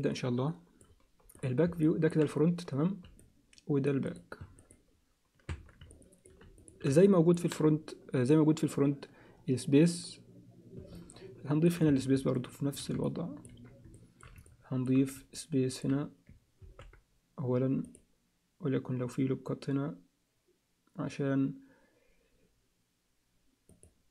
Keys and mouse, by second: 1.9 alt+middle click, 3.2 alt+middle click, 4.6 Tab, 4.6 click, 5.6 Tab, 5.9 alt+middle click, 6.6 alt+shift+middle click, 6.9 alt+middle click, 10.9 alt+middle click, 12.0 Tab, 12.3 alt+middle click, 13.0 ctrl+alt+middle click, 13.9 alt+shift+middle click, 14.4 ctrl+alt+middle click, 15.4 alt+middle click, 16.6 ctrl+r.